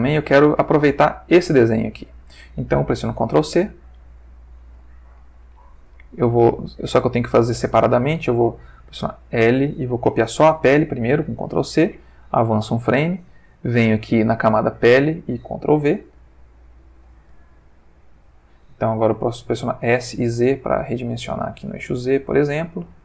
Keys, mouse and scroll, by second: 1.0 g, 1.9 Escape, 3.5 ctrl+c, 6.8-7.7 drag, 9.2 l, 11.5 ctrl+c, 12.3 Right, 13.9 click, 14.6 click, 16.0 ctrl+v, 19.8 s, 20.1 z, 21.1 click, 21.3 g.